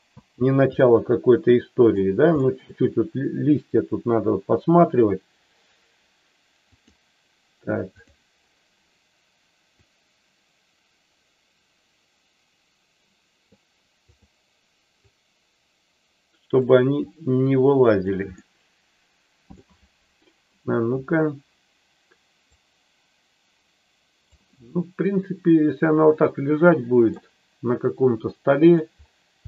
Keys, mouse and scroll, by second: 0.1 space, 0.7-1.8 middle drag, 2.4 middle click, 6.9 click, 7.8 click, 9.8-13.6 drag, 15.0-16.5 drag, 17.1 click, 18.4-19.6 middle drag, 22.5-24.3 drag, 24.6-27.1 middle drag, 28.2 middle click.